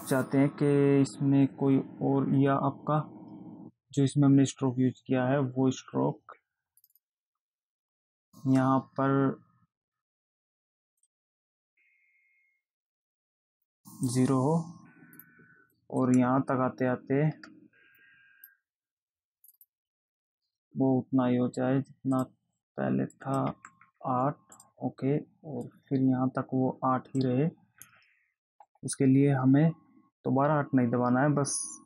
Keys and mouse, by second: 7.1 click, 11.4 click, 13.8 click, 15.4 click, 16.3 click, 19.7 click, 22.5 click, 23.5 click, 24.9 click, 26.0 click.